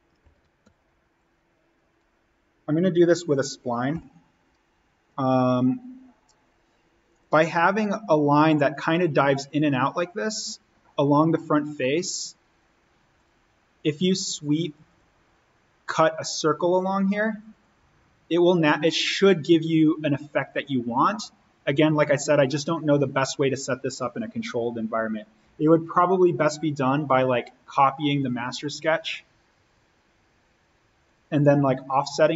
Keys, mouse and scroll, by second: 0.0 click, 0.2 alt+s, 0.6 alt+n, 1.4-1.9 scroll down 1, 3.8 s, 5.0 click, 24.1 Escape, 26.4 click.